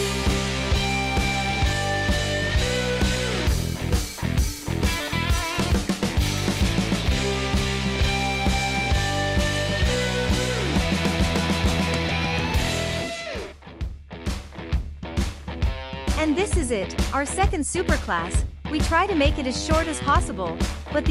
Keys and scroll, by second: 5.3 u, 8.8 0, 9.0 Return, 10.1 space, 13.6 space, 18.9-19.8 typing, 21.0 space.